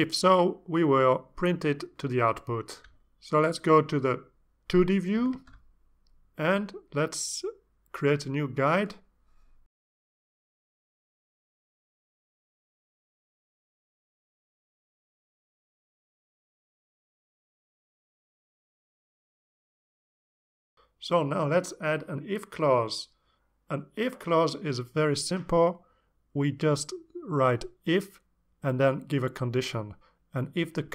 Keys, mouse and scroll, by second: 5.7 click, 7.0-18.3 drag, 18.8 alt+Tab, 20.2 click, 20.5 click, 21.6 Return, 22.9 Return, 23.1-25.6 typing, 26.8-29.1 typing, 30.5 shift+0.